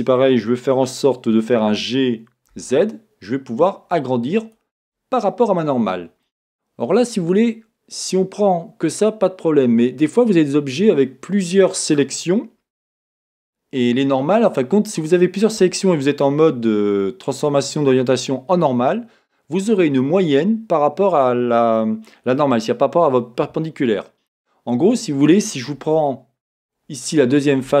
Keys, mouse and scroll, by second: 1.7 g, 4.5 click, 6.2-14.2 middle drag, 14.2-17.3 drag, 17.3-27.8 middle drag, 26.9 scroll.